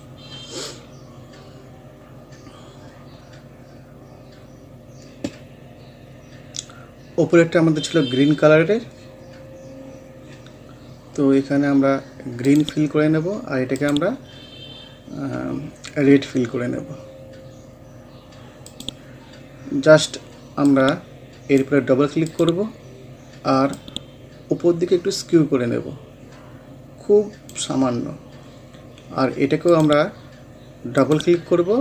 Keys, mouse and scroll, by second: 0.3 scroll down 1, 2.1-2.4 scroll up 1, 2.8 scroll down 1, 4.0 scroll up 1, 4.7 scroll down 1, 6.5 scroll up 1, 12.5 click, 14.2 scroll down 1, 15.7 scroll up 1, 18.7 click, 19.7-20.7 scroll up 1, 20.7-28.1 drag, 28.1-28.8 scroll down 1, 28.8-29.7 scroll up 1, 29.7-31.8 drag.